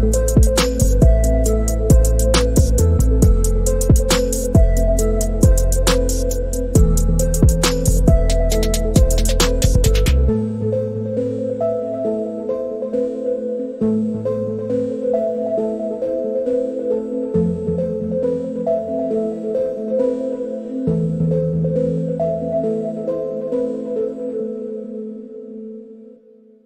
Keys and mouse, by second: 0.1-4.6 middle drag, 8.5 f, 10.9-11.5 drag, 13.5-16.5 drag, 17.8-18.4 drag, 20.6 click, 22.2 click, 23.5-24.2 drag, 26.1 alt+middle click.